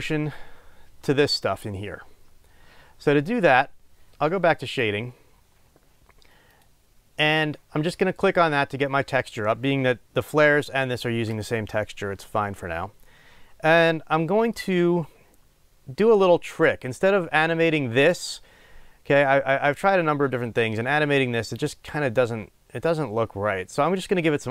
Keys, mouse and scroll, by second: 4.8 click.